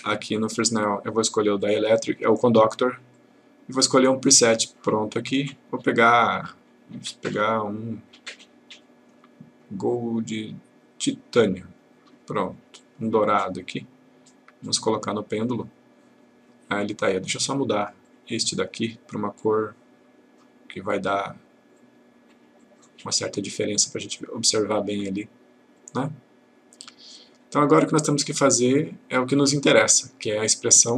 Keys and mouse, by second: 0.6-1.2 click, 4.8 click, 11.6 click, 14.7-15.6 click, 18.0 click, 21.8 click, 25.8-30.5 click.